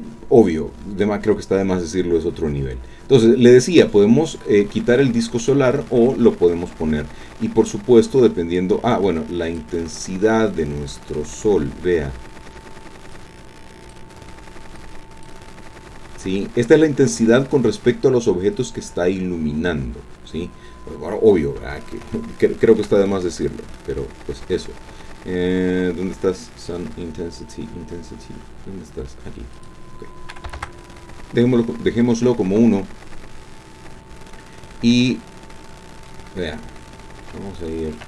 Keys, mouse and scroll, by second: 3.7 click, 5.4 click, 8.5-9.8 drag, 10.3-11.4 drag, 13.1 click, 14.8 click, 22.1 shift+click, 29.5 click, 30.5 KP_1, 30.6 KP_Enter, 34.1-34.9 scroll down 2, 35.0-36.3 drag, 36.8 scroll up 2, 37.3-38.0 shift+drag.